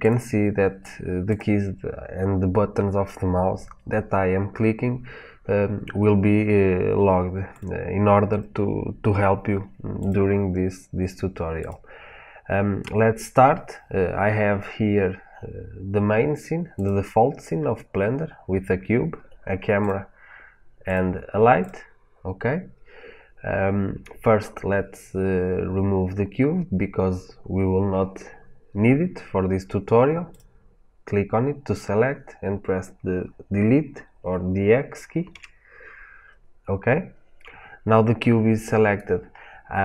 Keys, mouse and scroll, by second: 1.2 click, 7.4-10.0 drag, 11.5 click, 16.6 click, 19.7 click, 20.8 click, 21.5 click, 30.2 click, 35.2 Delete.